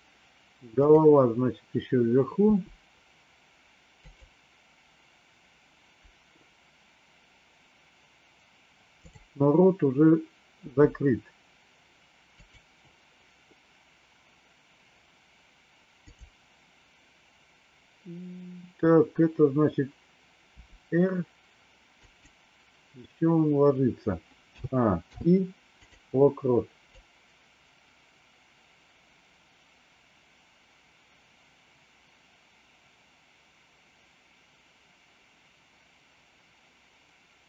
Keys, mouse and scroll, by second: 0.8 click, 2.3 r, 10.6 r, 15.9 click, 20.4 r, 24.5 a, 25.0 i, 27.0-37.4 drag.